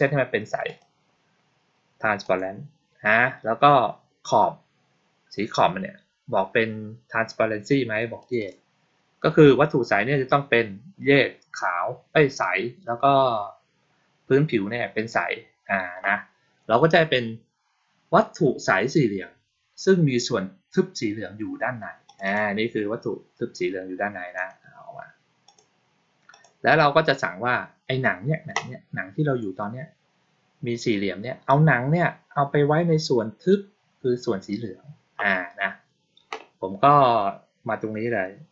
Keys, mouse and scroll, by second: 0.5 click, 2.1 click, 8.1 click, 8.3 click, 21.9 click, 22.1 click, 24.2 click, 25.3 click, 26.2 click.